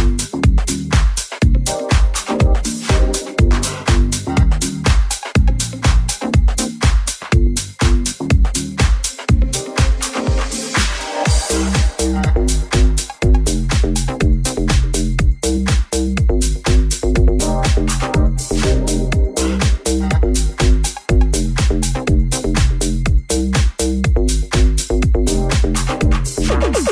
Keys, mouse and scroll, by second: 0.0-9.9 shift+middle drag, 0.8 g, 4.2 g, 5.2 s, 9.3 Tab, 10.4 middle click, 11.0 Tab, 11.3-12.6 middle drag, 13.2 middle click, 13.4 right click, 13.5 middle click, 14.3 Tab, 14.3 right click, 14.3-20.1 middle drag, 14.8 l, 20.1 alt+z, 21.0 click, 21.4 Tab, 21.9 ctrl+a, 22.1-26.9 middle drag, 22.9 w, 24.8-26.9 drag.